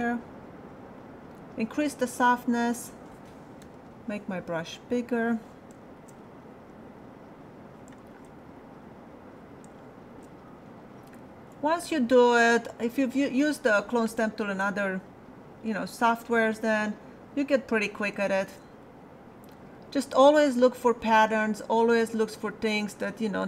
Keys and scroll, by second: 3.6 alt+], 12.0 space.